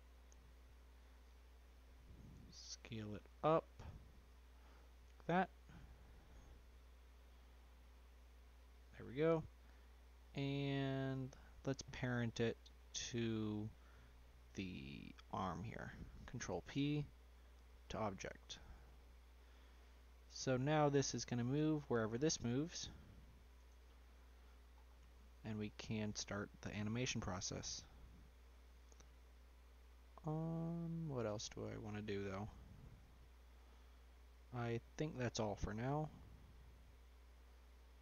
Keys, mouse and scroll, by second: 2.6 s, 5.2 g, 9.0 middle click, 9.5 scroll up 1, 9.7 scroll down 2, 9.9 middle click, 10.4-11.1 scroll up 2, 10.5 middle click, 11.1 shift+middle click, 11.6-12.8 scroll down 2, 12.8 s, 15.3 shift+click, 16.5 ctrl+p, 18.5 click, 18.9-19.5 middle drag, 19.5-20.2 scroll down 5, 20.2-21.1 middle drag, 21.1 click, 21.7 click, 22.6 g, 24.0-24.4 middle drag, 24.4 scroll down 1, 24.7-25.6 scroll up 7, 25.6-26.1 middle drag, 26.1-26.4 scroll up 1, 26.4-27.2 middle drag, 27.2 scroll down 1, 27.3-27.8 middle drag, 27.8-28.3 scroll down 4, 28.3-31.7 middle drag, 31.7-32.5 scroll down 3, 32.5-34.2 middle drag, 34.2-34.8 scroll down 1, 34.8-36.2 middle drag, 36.2-36.6 scroll down 2, 36.6-37.9 middle drag, 37.9 drag.